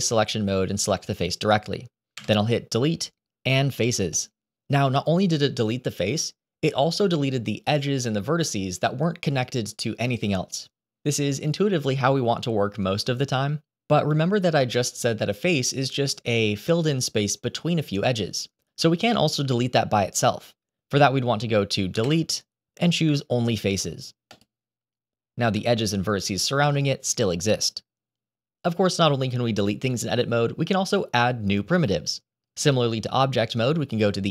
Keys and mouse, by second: 0.6 click, 2.1 Delete, 13.8 ctrl+z, 21.9 Delete, 25.5-27.3 middle drag.